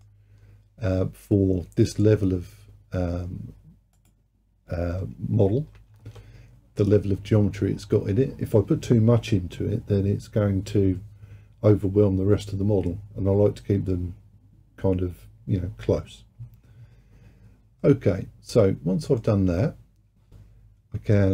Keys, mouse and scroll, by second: 4.0-7.0 drag, 17.8-20.9 middle drag.